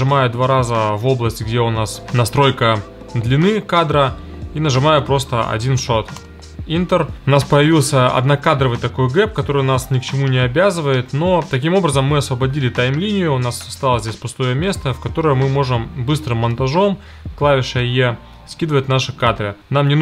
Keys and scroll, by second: 4.9 1, 6.1 Return, 16.4 e, 17.7 e.